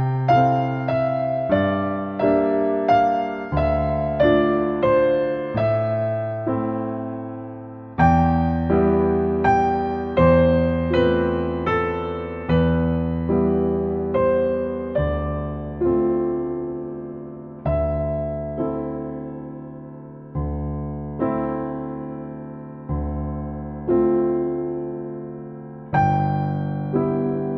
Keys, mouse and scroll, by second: 0.8 click, 1.2-3.4 middle drag, 3.4 click, 3.8 middle click, 4.2 click, 4.4-5.9 shift+middle drag, 5.9-6.3 scroll up 2, 6.0 shift+middle click, 6.3 middle click, 6.6 click, 8.0 click, 8.3 click, 9.6 middle click, 10.1 click, 10.5 click, 10.6-11.3 scroll down 1, 11.3 middle click, 11.6-16.8 drag, 16.8-17.4 scroll down 4, 19.6 click, 19.9 ctrl+shift+right click, 20.7 scroll up 2, 21.3 click, 23.2 click, 23.4-23.9 scroll up 2, 24.2 scroll down 3, 24.3 middle click, 25.1 scroll up 3, 25.9 click, 26.8-27.5 drag.